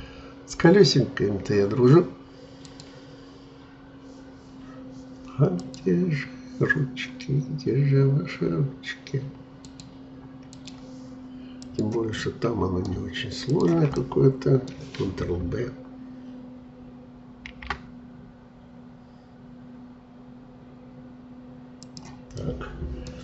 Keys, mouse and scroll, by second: 2.7-8.6 drag, 9.6-12.2 drag, 12.2-13.5 middle drag, 13.5 shift+click, 14.0-17.1 middle drag, 17.4 ctrl+b, 22.3-23.2 middle drag.